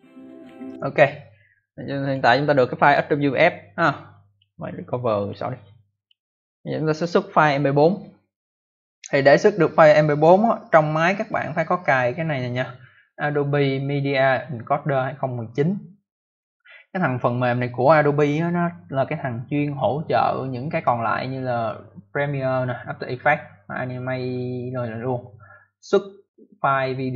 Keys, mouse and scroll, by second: 0.6 click, 1.9 click, 4.2 click, 5.1 click, 5.9 click, 6.9 click, 11.7 click.